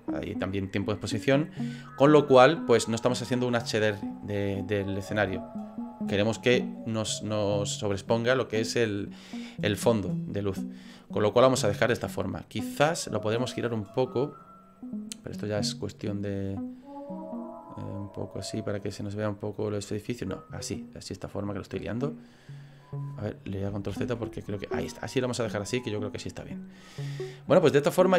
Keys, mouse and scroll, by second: 12.6 right click, 14.0 click, 14.4-15.7 scroll down 1, 15.7-16.0 scroll down 1, 16.1 click, 17.6 click, 24.1 ctrl+z.